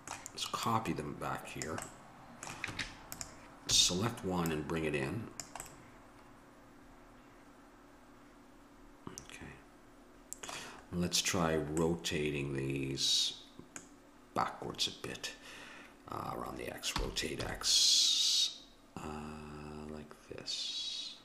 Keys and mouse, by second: 0.0 middle click, 0.7-2.4 drag, 2.7 Tab, 3.7 a, 4.5-6.1 drag, 11.3-12.5 middle drag, 17.0 r.